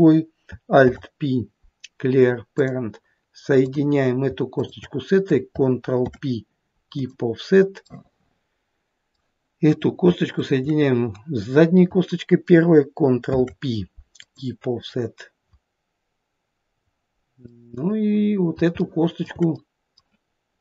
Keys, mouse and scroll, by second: 0.8 alt+p, 3.6 click, 4.6 shift+click, 6.0 ctrl+p, 8.0 middle click, 9.7 click, 10.4 shift+click, 13.3 ctrl+p, 14.8-16.3 scroll down 1, 16.3-16.9 scroll down 1, 17.5 middle click, 17.5-18.1 scroll down 1, 18.2 middle click, 18.8 shift+middle click, 19.3 shift+middle click, 19.6 middle click.